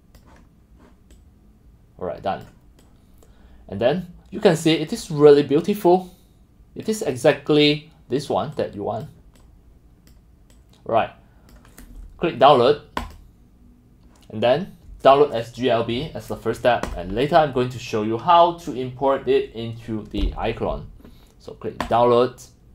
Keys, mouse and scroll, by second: 0.3 click, 1.2-2.4 drag, 2.9-4.9 drag, 5.3-5.9 drag, 5.9 middle click, 6.1 click, 6.1-7.1 middle drag, 8.7-9.1 drag, 9.4-10.1 drag, 10.7-11.7 drag, 14.2 drag, 16.9 click, 21.8 click.